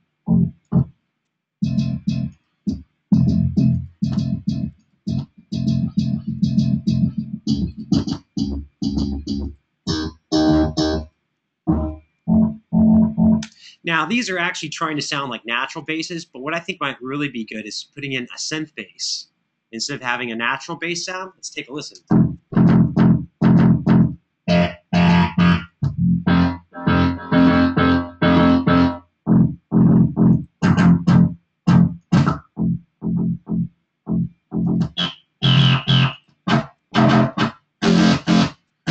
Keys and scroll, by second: 13.2 space, 21.7 space.